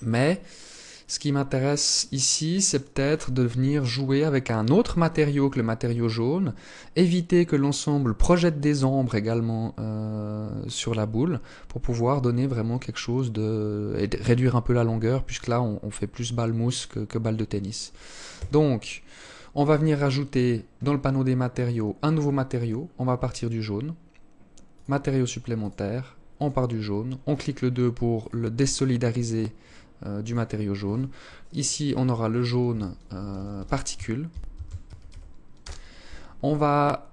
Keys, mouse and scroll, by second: 17.4 Escape, 19.1 click, 19.9-21.3 scroll up 18, 21.8 click, 23.8 click, 24.7 click, 26.4 click, 27.4 click, 36.9-37.1 scroll down 6.